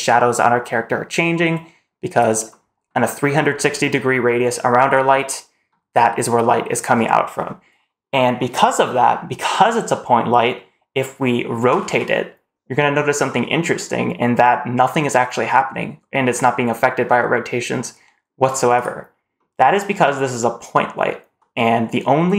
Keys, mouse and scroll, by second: 2.9-3.2 drag, 2.9 middle click, 5.0-5.5 drag, 5.0 middle click, 6.1-6.5 drag, 6.1 middle click, 6.8-7.2 scroll down 1, 7.2-10.2 scroll up 1, 10.4-10.9 drag, 10.4 middle click, 10.5 middle click, 11.5 r, 19.2-19.6 middle drag, 21.4-21.9 middle drag.